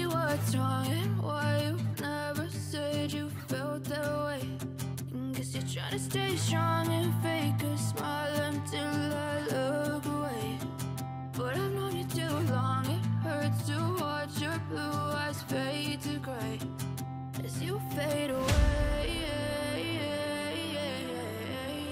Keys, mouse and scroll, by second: 0.9 ctrl+=, 1.4 ctrl+=, 2.3-3.3 scroll up 13, 4.0 scroll up 1, 11.8 ctrl+j, 14.8 double click, 18.0-21.9 typing.